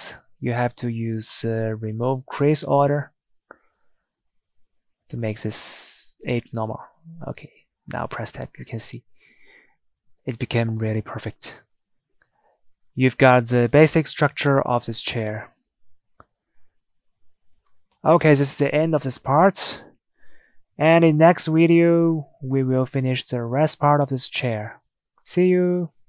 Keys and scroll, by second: 7.0 Tab, 19.9 Tab.